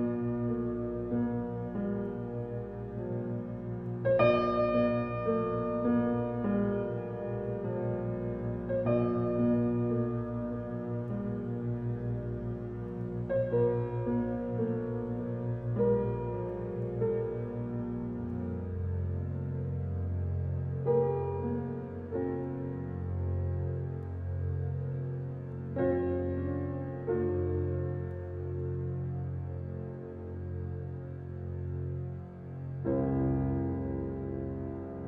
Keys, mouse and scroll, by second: 7.0 click, 8.9 Tab, 9.4 scroll down 1, 9.8 alt+middle click, 10.5 shift+middle click, 11.0-13.0 scroll up 6, 13.0-16.6 drag, 22.3 click, 23.0 Tab, 25.8 click, 26.6 click, 29.8-32.4 drag, 32.4 Tab, 33.7 click.